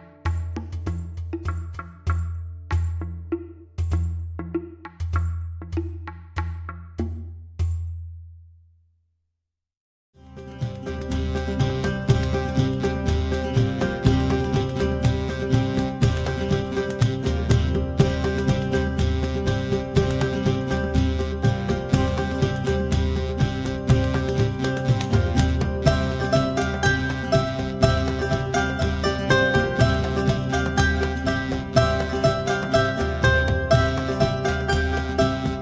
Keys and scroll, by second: 20.2 Tab, 21.9 KP_Enter, 24.9 KP_Enter.